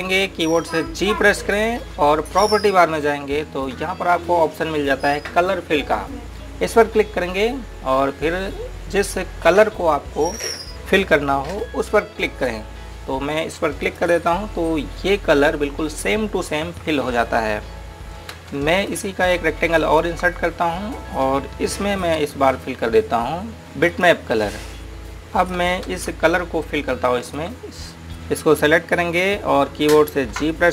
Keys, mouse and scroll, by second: 3.0 g, 8.1 click, 14.6 click, 19.2 ctrl+Num_Lock, 19.4 space, 20.1 click, 20.9 right click, 23.3 g, 24.8 click, 26.9 ctrl+space, 27.7 click, 28.1 z, 28.8 space.